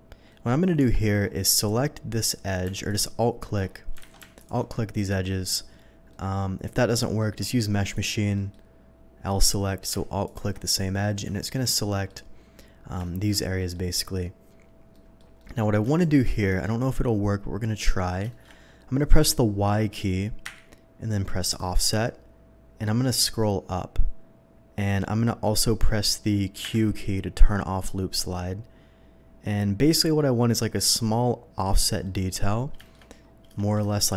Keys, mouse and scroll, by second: 0.3 middle click, 0.9 Tab, 2.1 click, 2.8 alt+click, 4.0 a, 4.4 click, 4.7 alt+middle click, 6.1 middle click, 7.2 middle click, 7.8 click, 8.3 middle click, 10.2 alt+click, 10.7 middle click, 11.3 middle click, 11.7 shift+middle click, 13.0 middle click, 13.6 middle click, 14.9 middle click, 15.3 middle click, 15.8 middle click, 16.6-18.0 middle drag, 18.3 middle click, 20.4 y, 21.4 click, 27.0 q, 31.7 click, 32.1 middle click, 32.8 middle click, 33.1 shift+middle click, 33.9 shift+middle click.